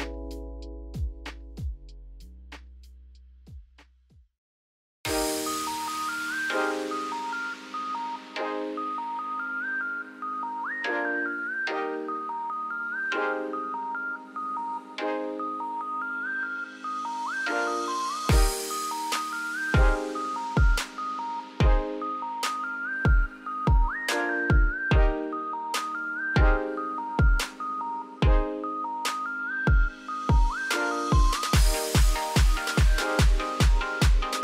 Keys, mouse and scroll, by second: 0.2 Tab, 0.4 scroll down 1, 0.4 middle click, 1.6 z, 2.0 middle click, 2.9 scroll down 1, 3.2 shift+middle click, 3.5-3.9 scroll up 4, 3.9 scroll down 1, 4.0 middle click, 4.4 scroll up 2, 4.7 1, 5.1 z, 5.7-6.1 scroll up 1, 6.1 `, 6.8-7.9 scroll up 5, 7.1 shift+middle click, 7.9 click, 8.3 g, 11.3 z, 11.6 scroll down 4, 11.8-13.1 middle drag, 13.1 ctrl+z, 13.3 scroll down 3, 13.5 middle click, 13.9-14.3 scroll up 1, 14.3 g, 16.1 Tab, 16.3 scroll down 4, 16.5-17.0 shift+middle drag, 17.0-17.7 scroll up 3, 17.7-18.3 shift+middle drag, 18.3-20.2 scroll up 1, 20.2 click, 21.3 ctrl+a, 22.2 click, 22.7 x, 23.4 click, 23.5 Tab, 23.8 middle click, 24.3-25.0 scroll up 2, 25.0-26.5 shift+middle drag, 26.5 ctrl+z, 26.8 ctrl+z, 27.3 ctrl+z, 28.3 click, 30.6 ctrl+z, 30.8 ctrl+z, 31.2 ctrl+z, 31.8 ctrl+z.